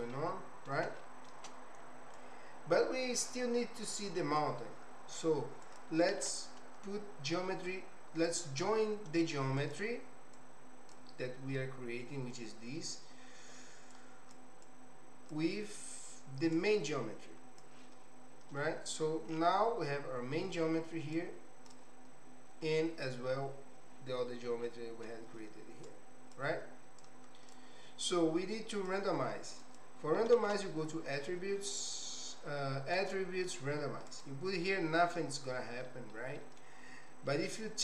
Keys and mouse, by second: 0.1 middle click, 1.1 shift+middle click, 2.1-3.4 drag, 4.0 click, 6.1 shift+a, 10.5 click, 14.0 click, 14.8 click, 16.6-17.8 drag, 21.2 click, 24.6 middle click, 26.0 click, 27.1 click, 28.0-29.0 drag, 30.3 shift+a, 35.9 middle click, 36.3 typing.